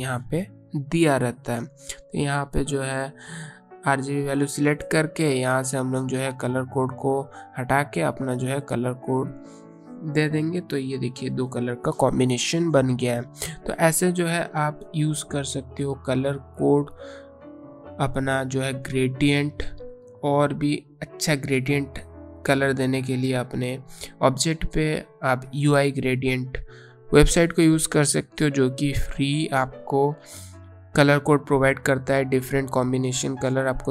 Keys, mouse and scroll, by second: 6.1 click, 7.3 BackSpace, 8.6 ctrl+v, 9.9 click, 14.5 click.